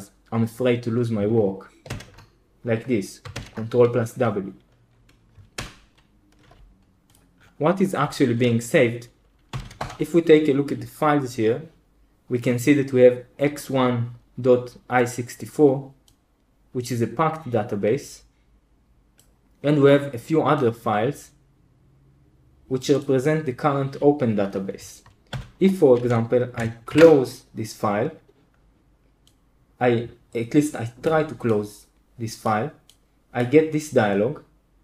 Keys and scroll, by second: 1.8 ctrl+w, 3.3 ctrl+w, 5.5 super+h, 9.2-10.0 typing, 25.2 super+l, 26.8 super+q.